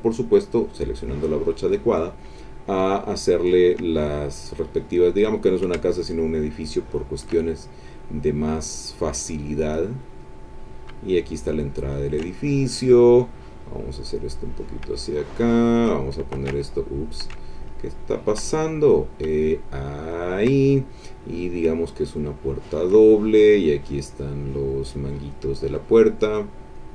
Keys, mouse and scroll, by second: 0.3 click, 0.8 middle click, 1.7 middle click, 2.4 middle click, 2.9 ctrl+middle click, 4.0 ctrl+middle click, 5.6-7.4 shift+drag, 7.9-10.4 drag, 10.7-12.3 shift+drag, 13.5 click, 14.7-16.0 shift+drag, 16.4 ctrl+z, 17.1-18.5 shift+drag, 19.1-20.6 shift+drag, 21.4-23.0 shift+drag, 23.9 click, 25.0 click, 26.5 click.